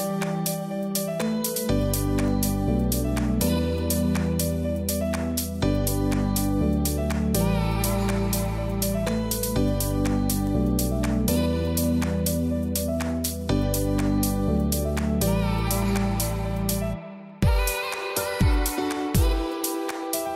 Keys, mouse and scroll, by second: 0.6 alt+click, 2.7 ctrl+z, 3.0 click, 3.2-9.4 typing, 3.3 click, 4.4 click, 5.5 click, 7.5 click, 8.2 click, 9.5 click, 11.3-15.9 typing, 12.4 click, 13.4 click, 14.0 click, 16.7 click, 17.8-20.3 typing, 17.9 click.